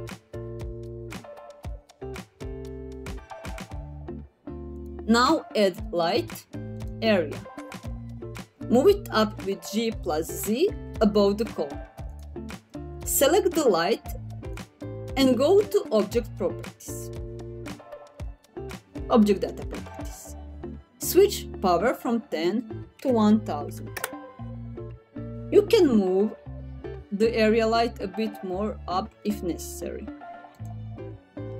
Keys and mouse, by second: 0.3 click, 4.2 middle click, 4.5 ctrl+z, 5.2-7.3 drag, 9.6 g, 10.8 z, 13.6 middle click, 14.9 click, 20.4-24.4 drag, 23.8 KP_0, 29.2 g, 29.5 z, 30.9 click.